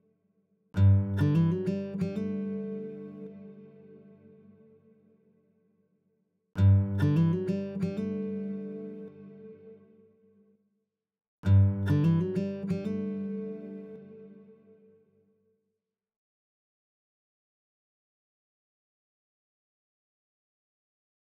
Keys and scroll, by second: 0.8 space, 5.2 a, 6.4 space, 11.6 space, 17.9 space.